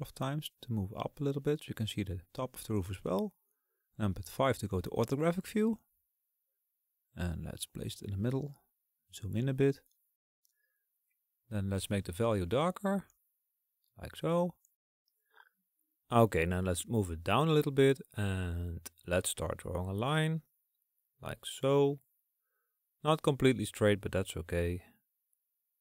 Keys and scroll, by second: 2.2 KP_8.